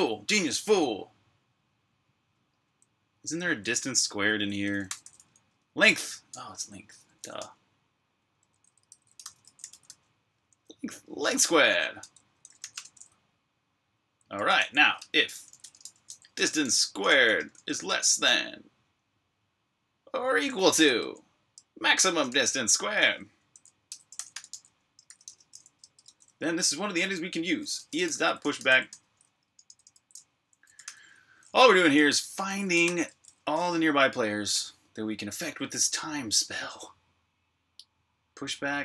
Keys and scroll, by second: 2.5-5.2 typing, 6.6-7.5 typing, 8.2 Return, 8.5-10.1 typing, 10.7 Tab, 10.8 Tab, 10.9 Tab, 11.8 Escape, 12.2 Escape, 12.5 typing, 13.7-17.6 typing, 19.6-25.9 typing, 27.3-33.1 typing, 35.1 typing.